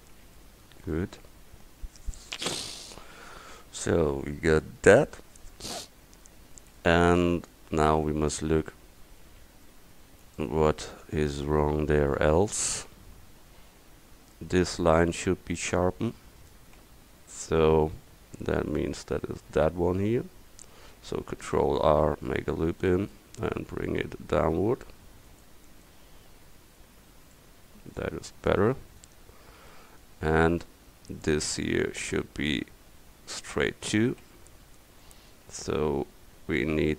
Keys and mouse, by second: 0.4 click, 2.6 Tab, 5.9 click, 13.0-14.1 middle drag, 17.2 Tab, 21.4 ctrl+r, 26.7 middle click, 27.0 Tab, 34.3 Tab, 35.6 middle click.